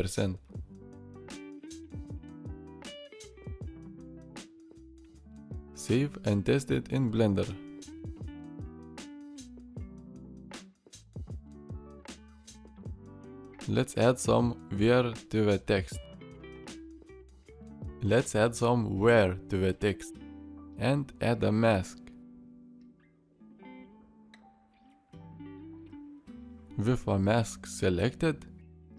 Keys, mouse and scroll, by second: 9.1 alt+s, 11.0-12.2 middle drag, 12.5-13.6 middle drag, 16.0-16.7 middle drag.